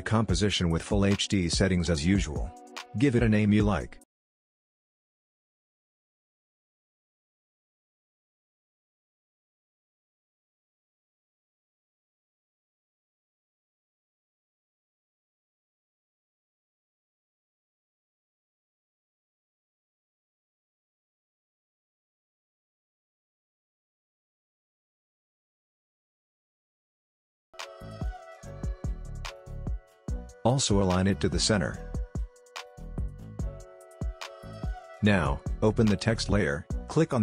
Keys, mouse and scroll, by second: 1.5-4.5 typing, 6.0-7.6 drag, 13.2-16.4 typing, 18.0 click, 20.6-23.0 drag, 23.0 ctrl+alt+Home, 26.1-28.8 drag, 27.6-28.5 shift+drag, 32.1 scroll down 2, 32.6-33.4 scroll up 1, 33.4 click.